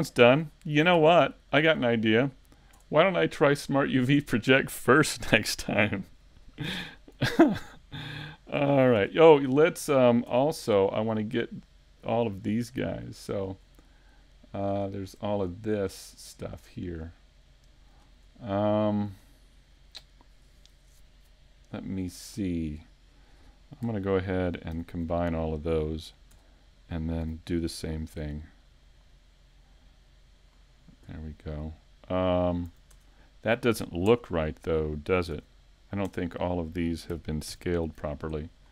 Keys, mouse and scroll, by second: 2.8 Tab, 3.5 middle click, 3.5 scroll down 2, 4.3 shift+middle click, 9.0 Tab, 10.3 Tab, 11.3 right click, 11.3-11.6 scroll up 4, 12.4 middle click, 13.3 right click, 13.8 shift+middle click, 14.7 shift+right click, 18.0-18.5 scroll up 3, 18.4 shift+middle click, 19.2-19.8 scroll down 1, 21.4 scroll down 2, 32.9 Tab, 34.1 Tab, 36.1 Tab.